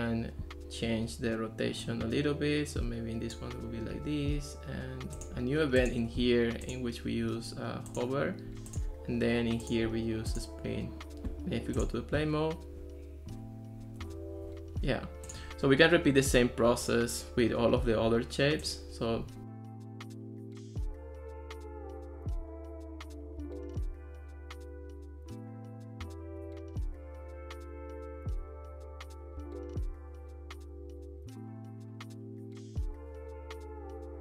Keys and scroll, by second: 21.4 super+v, 21.7 Return, 25.0 super+v, 25.3 super+v, 25.4 Return, 26.5 Escape, 27.6 super+v, 27.9 super+v, 28.1 Return, 33.3 super+v, 33.7 super+v, 33.9 Return.